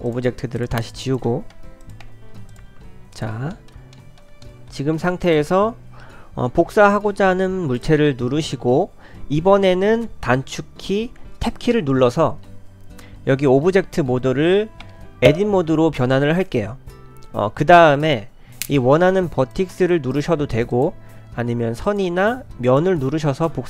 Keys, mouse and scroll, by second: 0.1 shift+click, 1.5 Delete, 1.8 click, 2.1 Delete, 2.5 click, 3.1 click, 3.5 middle click, 3.9 shift+middle click, 4.4 middle click, 5.2 click, 7.8 click, 14.8 Tab, 18.0 click.